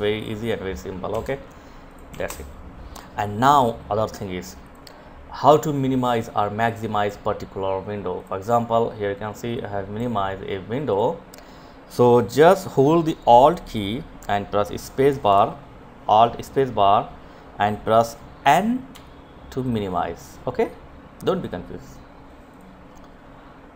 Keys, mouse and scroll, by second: 0.6 click, 0.9 Delete, 3.5-10.6 drag, 14.1 alt+space, 17.7 n, 21.2 click.